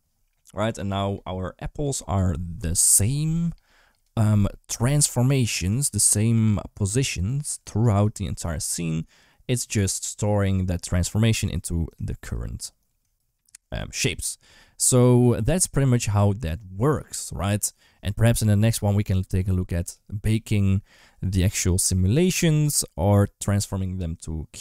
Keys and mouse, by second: 0.6-3.8 drag, 9.0-11.3 drag.